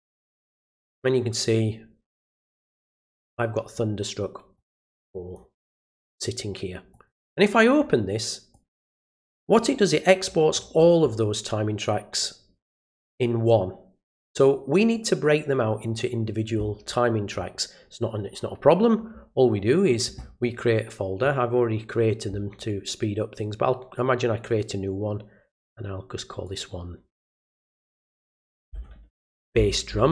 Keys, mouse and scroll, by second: 1.4 click, 3.0 click, 4.5 click, 6.1 click, 6.9 click, 8.5 click, 9.6 scroll down 2, 10.2-11.0 scroll down 3, 12.2-14.1 drag, 14.9-15.9 drag, 22.6 right click, 24.4 click, 26.4 click.